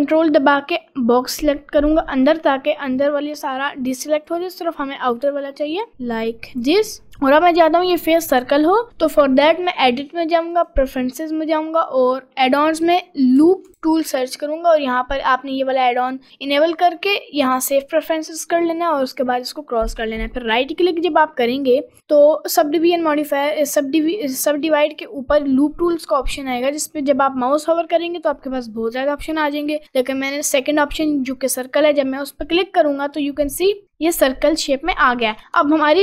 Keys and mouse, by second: 3.1 ctrl+click, 4.4 ctrl+click, 5.6 ctrl+click, 6.0 ctrl+click, 9.6-10.7 drag, 21.6-32.6 right drag, 35.2 middle click, 35.6 Tab.